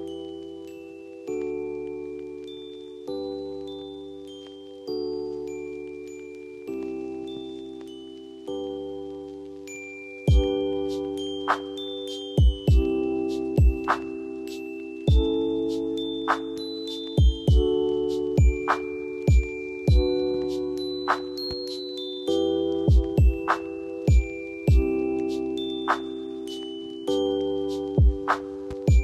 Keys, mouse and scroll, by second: 0.1 ctrl+t, 2.3 alt+click, 3.9 alt+click, 6.3 alt+click, 8.6 alt+click, 21.8 ctrl+0, 24.2 ctrl+t, 26.2 ctrl+t, 28.0 ctrl+alt+t.